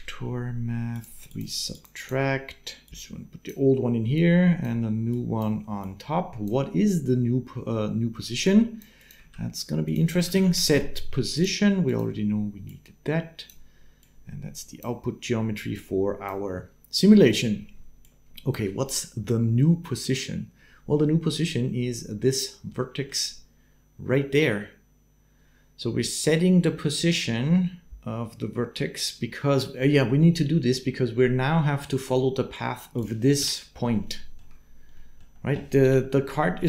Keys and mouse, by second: 1.8-3.3 drag, 3.9 click, 5.9 click, 8.3 click, 8.8 click, 9.1 shift+a, 11.2 click, 12.6 click, 13.8-14.8 drag, 15.7 click, 17.8 click, 22.5 middle click, 33.2 KP_7, 33.8 shift+middle click, 34.7 middle click, 35.6 KP_7, 36.2 shift+middle click.